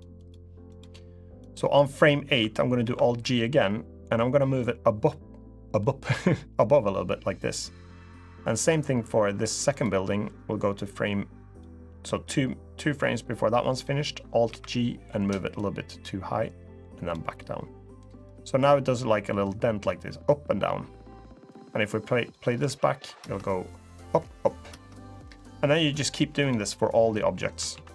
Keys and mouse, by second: 0.0 click, 0.5-1.4 drag, 3.2 alt+g, 4.3-7.2 drag, 9.4 click, 10.5 click, 12.5 click, 15.3 alt+g, 15.3-16.8 drag, 18.0-22.0 drag, 22.5 alt+z, 22.9 space, 24.7 space, 25.4-26.5 drag.